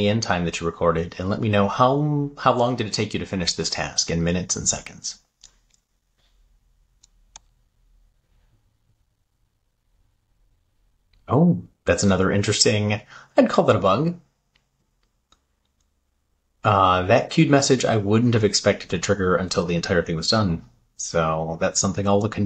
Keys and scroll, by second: 6.4 super+v.